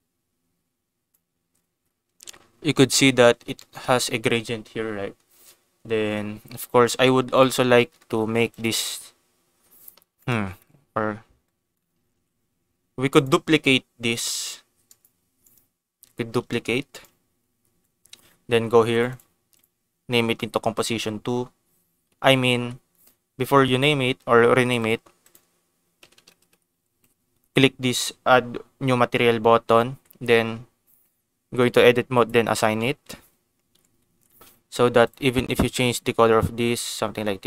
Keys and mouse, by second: 3.5 shift+middle click, 7.3 click, 7.7 middle click, 8.1 shift+a, 11.7 shift+middle click, 12.1 ctrl+s, 13.2 click, 14.3 g, 14.8 click, 15.1 g, 15.4 right click, 16.4 shift+d, 16.9 right click, 18.9 click, 19.1-20.8 drag, 22.3 ctrl+z, 23.7 click, 24.6 click, 25.3-27.8 drag, 26.1 BackSpace, 27.2 BackSpace, 29.9 Tab, 32.1 click, 32.5 Tab, 33.7 Tab, 34.1 ctrl+s, 34.5 g, 35.0 click, 36.6 click.